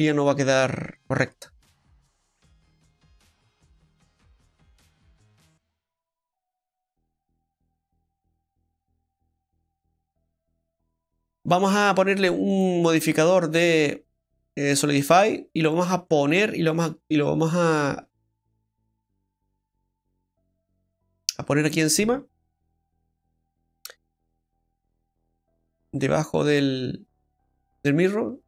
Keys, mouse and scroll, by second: 11.0 middle click, 11.0 scroll down 3, 11.0 a, 11.4 middle click, 12.5 click, 15.8 scroll down 3, 18.5 click, 18.5-19.6 scroll down 5, 19.6-21.0 scroll up 2, 21.9 scroll up 2, 22.7 scroll up 6, 23.6-24.1 scroll down 2, 26.4 click.